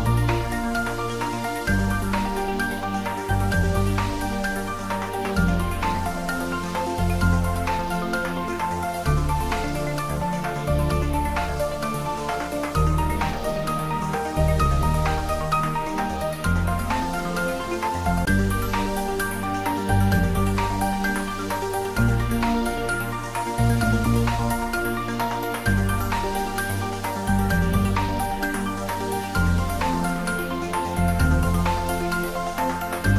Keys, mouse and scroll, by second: 2.0 ctrl+z, 4.1-5.3 scroll up 2, 5.3-6.0 scroll up 1, 6.0-11.1 middle drag, 11.1 alt+shift+click, 22.1 ctrl+z, 24.2 shift+click, 28.8-30.0 scroll down 1, 31.5 scroll down 1, 32.2 alt+shift+click.